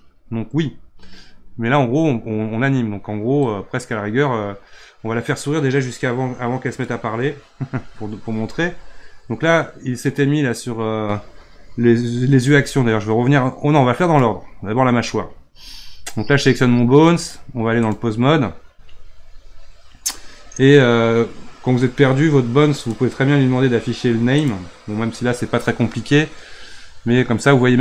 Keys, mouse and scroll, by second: 3.5-6.5 drag, 14.0 click, 17.2-20.3 drag, 22.8 click, 24.3 click.